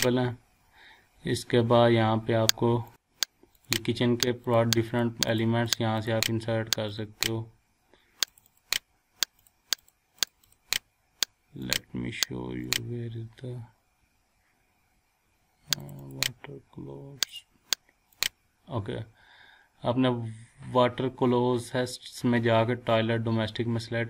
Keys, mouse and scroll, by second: 2.9 click, 15.8 click.